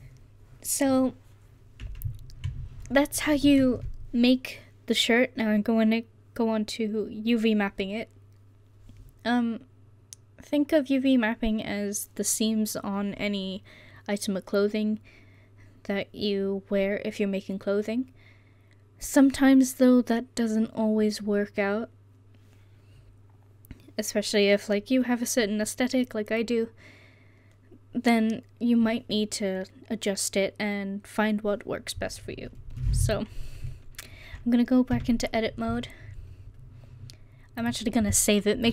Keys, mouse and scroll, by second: 33.1-33.7 right drag, 35.0 Tab.